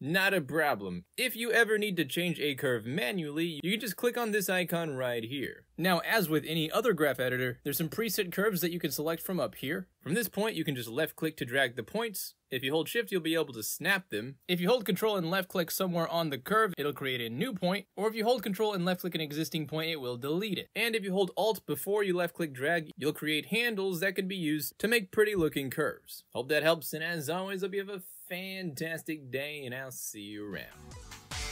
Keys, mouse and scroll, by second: 4.6 click, 6.6 ctrl+z, 8.1 click, 9.4 ctrl+Return, 9.6 ctrl+z, 10.3-14.3 drag, 15.5 ctrl+shift+Return, 15.8 ctrl+click, 17.0 click, 19.0 ctrl+click, 19.9 ctrl+click, 20.0 ctrl+z, 20.8 alt+z, 21.0-21.9 alt+drag, 23.0-24.4 alt+drag, 25.0-26.4 alt+drag, 27.1 space, 30.7 space.